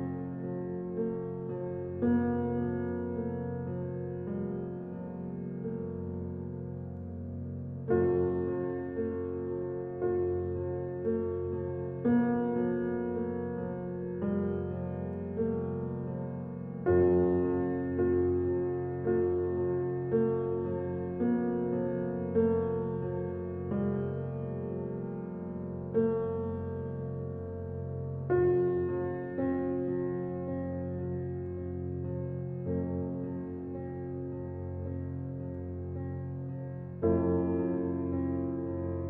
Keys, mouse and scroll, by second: 1.4 ctrl+alt+scroll down 1, 2.3 space, 2.5 click, 2.8 space, 5.1 ctrl+alt+scroll up 1, 6.3 space, 6.5 click, 6.9 space, 7.6 alt+click, 8.3-10.6 drag, 10.6-12.2 alt+right drag, 12.2 alt+click, 12.5 ctrl+alt+scroll up 1, 13.5 alt+click, 14.1-15.9 drag, 21.2 alt+click, 23.9 alt+click, 25.0 alt+right click, 25.7 click, 27.4 ctrl+alt+scroll down 1, 29.6 space, 29.8 click, 30.1 space, 31.5 click, 31.7 space, 32.3 ctrl+alt+scroll up 1, 32.8 ctrl+alt+scroll up 1, 33.4 ctrl+alt+scroll up 1, 34.1 space, 34.3 click, 34.6 space, 35.3 alt+right click, 36.4 alt+click, 37.0-39.0 drag.